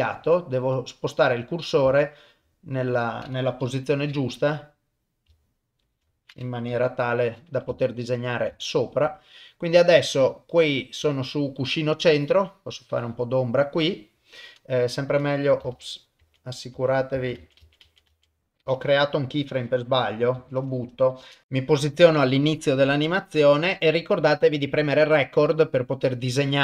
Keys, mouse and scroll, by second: 0.0 ctrl+middle click, 0.8 middle click, 1.9 shift+middle click, 2.8 middle click, 3.6 KP_7, 5.5 shift+right click, 6.7 KP_1, 7.8 ctrl+middle click, 8.6 shift+middle click, 11.9-13.2 drag, 15.8 ctrl+z, 16.2 ctrl+z, 17.2 ctrl+z, 17.4 ctrl+z, 17.6 ctrl+z, 17.9 ctrl+z, 18.1 ctrl+z, 19.5-19.9 drag, 20.4 Delete, 21.1 shift+Left, 21.4 shift+middle click, 24.5 click.